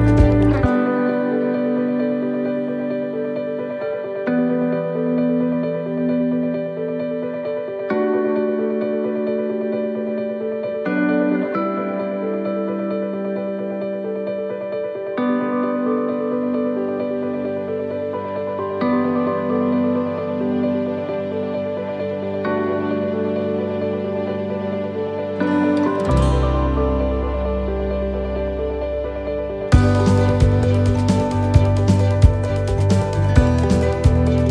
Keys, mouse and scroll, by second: 3.4 click, 3.4 middle click, 4.3-4.6 scroll up 1, 4.7 shift+middle click, 5.6 middle click, 6.3 shift+middle click, 6.9 scroll down 2, 7.3 shift+middle click, 7.7-8.3 scroll up 2, 8.8 ctrl+middle click, 10.3 shift+middle click, 13.3 click, 16.6 click, 16.6 middle click, 18.5 click, 19.3 right click, 19.7 shift+right click, 21.9 g, 24.3 shift+middle click, 25.9 right click, 26.6 l, 27.5 shift+d, 28.8 click, 30.5 click.